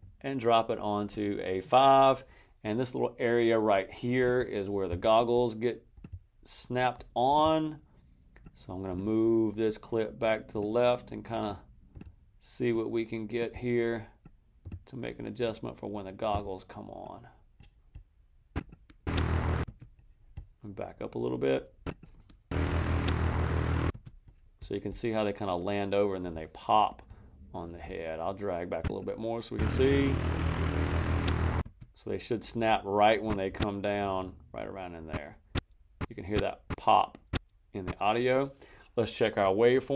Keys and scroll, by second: 18.9 space, 22.4 space, 23.8 space, 29.5 space, 31.5 space.